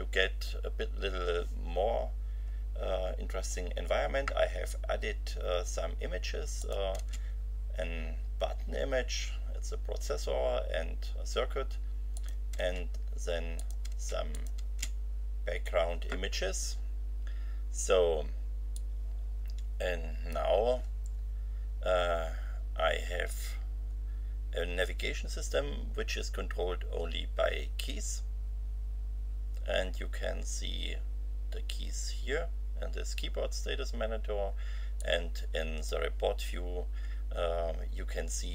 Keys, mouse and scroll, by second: 6.6 click, 6.9 space, 12.1 click, 12.5 space, 13.5 click, 13.9 space, 14.3 click, 14.6 space, 18.7-20.5 drag, 35.0-36.0 drag.